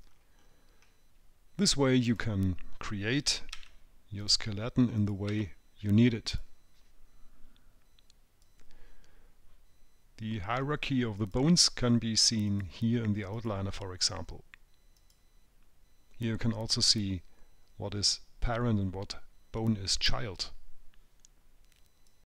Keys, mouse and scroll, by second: 0.5-0.9 scroll down 6, 2.5 click, 4.0 s, 5.4 click, 5.8 s, 11.7 click, 13.0 click, 13.8 click, 15.5 click.